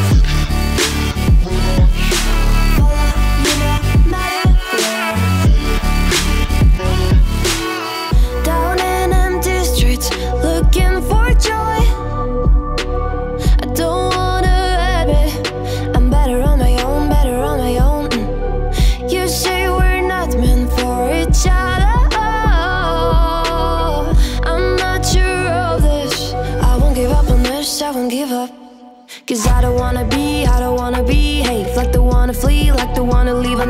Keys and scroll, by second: 0.0 shift+p, 5.0 Return, 5.5 space, 5.8 space, 6.0 space, 6.3 space, 7.5 space, 8.8-9.7 typing, 11.0-12.8 typing, 13.9-15.7 typing.